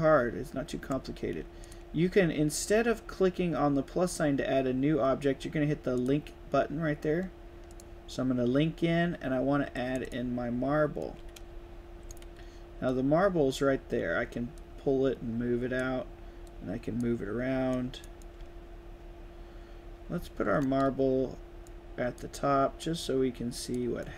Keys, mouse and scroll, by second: 1.5 drag, 5.9 click, 7.6-8.2 drag, 9.6 click, 9.9 click, 10.9-12.1 right drag, 11.1 d, 11.4 s, 12.8-13.5 drag, 14.5-15.7 drag, 16.3-16.9 drag, 17.6-17.9 drag, 18.2-20.6 right drag, 18.3 d, 20.0 s, 21.5-22.1 drag, 23.0-23.7 drag, 23.9-24.1 right drag, 24.0 a.